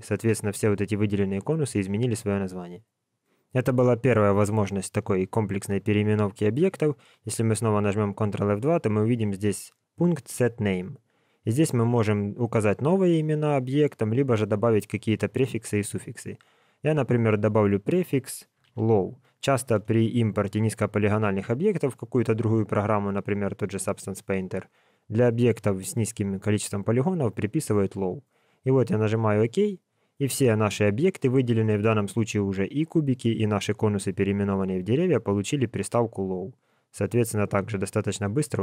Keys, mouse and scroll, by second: 7.3 ctrl+F2, 34.1 scroll down 4, 34.8 scroll up 1, 34.8 scroll down 1, 36.6 scroll down 7.